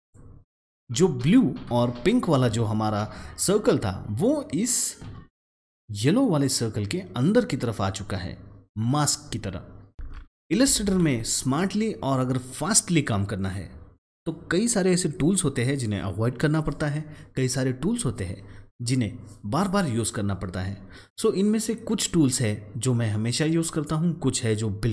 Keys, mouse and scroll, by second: 10.0 ctrl+shift+z, 10.8 ctrl+z.